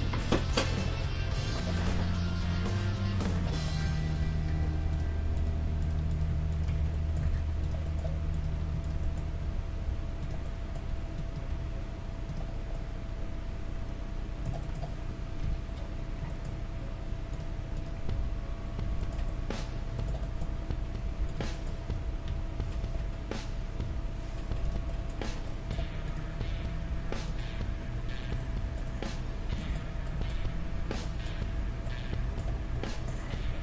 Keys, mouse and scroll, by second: 1.0-2.8 middle drag, 1.7 g, 3.6-5.4 middle drag, 3.9 ctrl+Tab, 4.6 ctrl+Tab, 5.4-7.0 right drag, 6.8 f, 7.0 middle click, 7.3 ctrl+Tab, 9.5 s, 10.9 g, 11.5 g, 15.5 KP_3, 17.3-19.7 right drag, 21.3-23.0 right drag, 22.3-23.3 middle drag, 22.3 g, 24.9-27.5 middle drag, 26.1-29.1 right drag, 28.4-33.6 middle drag.